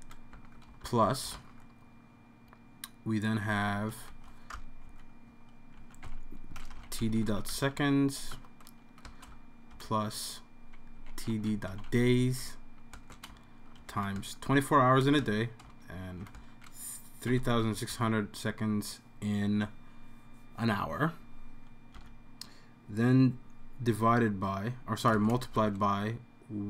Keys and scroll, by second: 0.0-1.8 typing, 4.1 typing, 5.5-15.2 typing, 8.3 Tab, 16.3-18.4 typing, 22.0 Right, 25.5 typing.